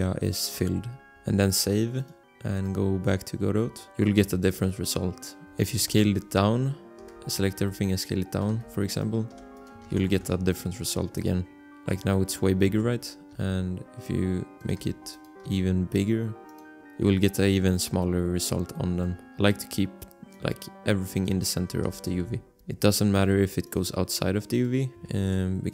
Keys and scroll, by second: 0.6 g, 1.1 ctrl+s, 6.1 alt+Tab, 7.0 a, 7.5 s, 8.5 g, 9.3 s, 10.0 ctrl+s, 10.3 alt+Tab, 12.9 alt+Tab, 13.3 s, 14.7 g, 15.4 s, 16.6 Tab, 19.1 g, 21.8-23.1 typing, 25.3 ctrl+s.